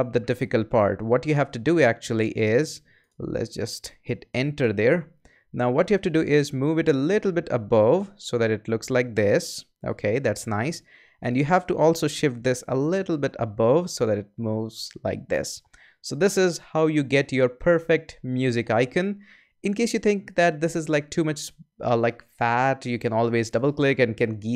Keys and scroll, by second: 4.6 Return.